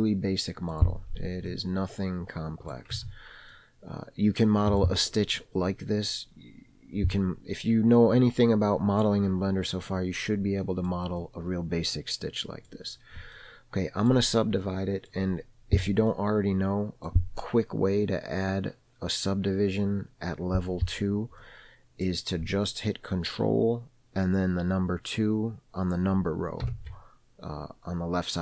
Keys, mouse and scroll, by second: 1.7 alt+z, 2.3-3.1 middle drag, 3.3 Tab, 3.9-5.2 middle drag, 5.7 middle click, 10.5 scroll up 1, 10.6 middle click, 11.5-13.0 middle drag, 13.7 middle click, 15.0 middle click, 16.3 scroll up 1, 16.4 middle click, 21.7 middle click, 27.0 ctrl+2.